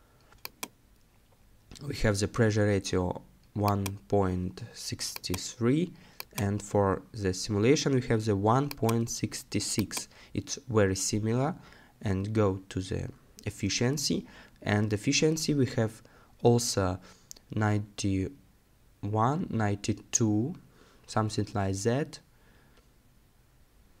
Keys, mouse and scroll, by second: 10.4 scroll down 1, 12.3 scroll up 1, 22.4 scroll up 1, 23.0 scroll down 1.